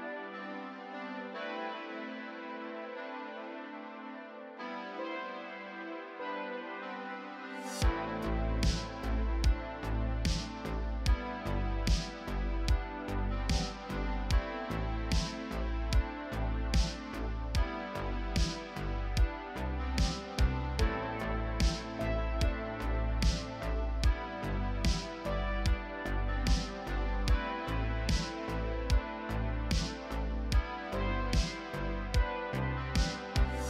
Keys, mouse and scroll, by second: 0.0-1.1 typing, 0.0 click, 0.4 scroll down 5, 0.7 middle click, 1.0 shift+middle click, 1.8 click, 2.1 Tab, 2.1 middle click, 2.1 scroll down 1, 2.2 3, 2.3 shift+middle click, 2.4 shift+click, 3.7-8.1 typing, 3.7 middle click, 3.7 scroll down 1, 4.2 click, 4.6-5.5 scroll up 2, 5.1 middle click, 5.6 middle click, 5.8 scroll down 2, 6.1 click, 6.1 middle click, 7.0 scroll down 5, 7.0 middle click, 7.1 middle click, 7.1 alt+a, 7.2 middle click, 7.5 scroll up 4, 7.6 click, 7.7 Tab, 7.8 middle click, 9.0 middle click, 9.2 a, 9.4 KP_7, 10.4-13.8 typing, 10.5-11.0 scroll up 3, 10.5 shift+middle click, 10.7 middle click, 11.6 middle click, 11.7 click, 12.0 Tab, 12.3 middle click, 12.8 scroll down 3, 13.1 click, 13.6 middle click, 13.7 ctrl+KP_Add, 14.7 middle click, 14.8 ctrl+z, 14.8 scroll up 1, 15.1 ctrl+KP_Add, 15.2 scroll down 1, 15.5 middle click, 15.5-17.0 typing, 15.8 middle click, 15.8 scroll down 1, 16.1 middle click, 16.5 middle click, 16.6 Tab, 17.1 shift+middle click, 17.2 scroll up 2, 17.3 shift+middle click, 17.5 shift+middle click, 17.7 scroll down 1, 17.8 Tab, 17.8 middle click, 18.0 click, 18.2 KP_3, 18.2 shift+d, 18.4 shift+middle click, 18.5 scroll up 1, 19.2 shift+middle click, 19.2 scroll down 2, 19.3 shift+middle click, 19.4 scroll up 1, 19.4 middle click, 19.5 a, 19.5 middle click, 19.6 Tab, 19.6 middle click, 19.6 scroll down 1, 19.7-20.4 scroll up 2, 19.8 Tab, 19.8 middle click, 19.9 click, 20.4-20.8 scroll down 1, 20.8 KP_1, 20.9 scroll up 3, 21.1 KP_3, 21.2 scroll down 1, 21.8 scroll down 1, 22.1 middle click, 22.2 scroll up 2, 22.6 click, 23.1 ctrl+KP_Add, 23.2 scroll down 1, 23.2 middle click, 23.3 scroll up 1, 23.5 KP_1, 23.6 s, 24.3 middle click, 24.4 KP_1, 24.6 ctrl+r, 24.8 scroll up 1, 25.5 shift+middle click, 25.5 scroll up 2, 25.8 click, 26.2 middle click, 26.3-29.1 typing, 26.5 middle click, 26.8 middle click, 26.9 scroll up 1, 27.0 middle click, 27.1 middle click, 27.2 ctrl+r, 27.4 middle click, 27.6 ctrl+r, 27.8 middle click, 27.9 shift+middle click, 28.0 scroll up 1, 28.1 middle click, 28.2 ctrl+r, 28.4 middle click, 28.5-29.1 scroll down 6, 28.7 middle click, 28.9 click, 29.2 Tab, 29.8 shift+middle click, 29.9 click, 30.2 scroll down 4, 30.2 middle click, 30.3 alt+a, 30.3 click, 30.4 scroll up 3, 30.5 shift+middle click, 30.5-32.9 typing, 30.7 Tab, 30.8 alt+a, 30.8 middle click, 31.0 scroll down 4, 31.1 middle click, 31.2 shift+middle click, 31.2-32.3 scroll up 8, 31.5 click, 31.7 middle click, 32.1 middle click, 32.3 alt+a, 32.8 alt+a, 32.9 shift+middle click, 32.9 scroll up 1.